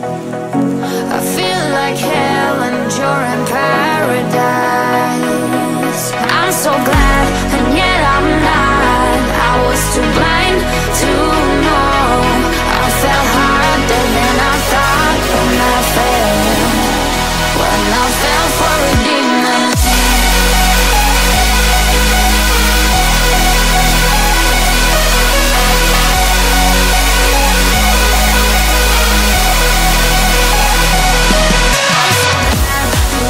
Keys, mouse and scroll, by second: 0.1 shift+click, 0.6 shift+double click, 1.1 shift+double click, 1.6 shift+click, 2.1 shift+click, 3.2 shift+click, 4.4 scroll down 5, 4.9 middle click, 7.6 shift+middle click, 9.4 scroll up 1, 12.1 shift+click, 13.0 shift+click, 14.5 shift+click, 20.8 middle click, 22.0 middle click, 22.7 shift+click, 23.4 shift+click, 24.4 shift+click, 25.3 shift+click, 26.0 shift+click, 27.4 shift+click, 28.0 shift+click, 29.3 shift+click, 30.1 shift+click, 30.7 shift+click, 31.2 shift+click, 31.9 shift+click, 32.8 shift+click.